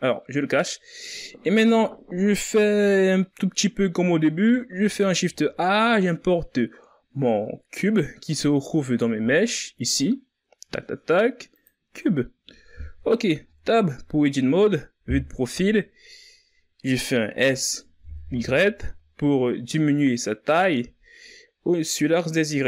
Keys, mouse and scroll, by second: 4.2 shift+a, 12.8 Tab, 14.3 KP_3, 16.7 s.